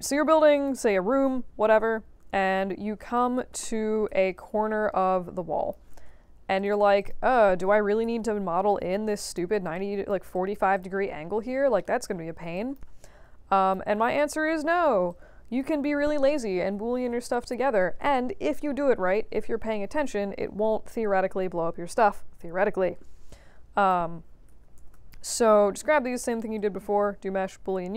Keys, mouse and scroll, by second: 0.1 scroll down 2, 0.5 click, 1.7 r, 2.5-3.1 drag, 3.3 ctrl+d, 3.6 e, 4.3-5.7 drag, 6.5 click, 6.9 click, 7.6-9.0 typing, 9.2 click, 9.7-10.0 alt+drag, 10.3 alt+drag, 10.7 click, 11.1 scroll up 2, 11.7 alt+middle click, 12.1 alt+scroll down 2, 12.5 alt+click, 13.6 click, 14.0-14.8 alt+drag, 15.0-15.5 alt+drag, 23.8 click, 24.5 ctrl+d, 24.7 ctrl+h, 25.3 click, 26.5-27.9 drag.